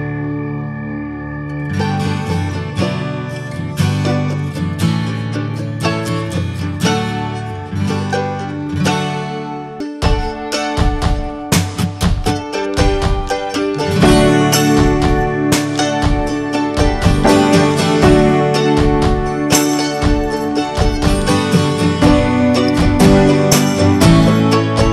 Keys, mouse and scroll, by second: 0.8-1.2 middle drag, 1.2-1.6 drag, 1.6 middle click, 2.1 click, 2.6 shift+middle click, 3.1-5.6 drag, 5.6-7.2 shift+middle drag, 7.2 f, 8.3 scroll up 2, 8.5 shift+middle click, 9.1 g, 10.7-12.5 drag, 12.5 f, 13.0 click, 13.9 f, 14.3 click, 15.3 scroll down 3, 15.4 shift+middle click, 15.8-17.0 scroll up 4, 16.0 middle click, 16.4 shift+middle click, 17.0-18.1 shift+middle drag, 18.1 f, 19.2-20.8 shift+drag, 20.8 scroll down 1, 20.9-22.0 shift+middle drag, 22.0 scroll up 1, 22.4-23.5 drag, 23.5 middle click, 24.3-24.9 drag.